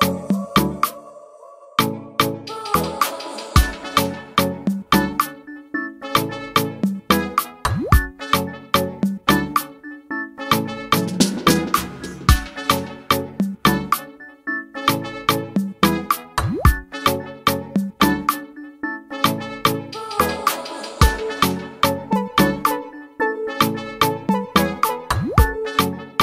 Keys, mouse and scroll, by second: 0.1 click, 0.9 click, 1.2-1.5 scroll down 1, 1.5-3.1 drag, 4.1-5.3 drag, 5.9 click, 6.4 click, 6.8 click, 11.0 click, 12.3 click, 15.5 click, 15.8 click, 16.6 click, 17.1 click, 18.9 click, 20.6 click, 21.6 click, 22.2 scroll up 3, 24.4 click, 25.3 click, 25.9 click.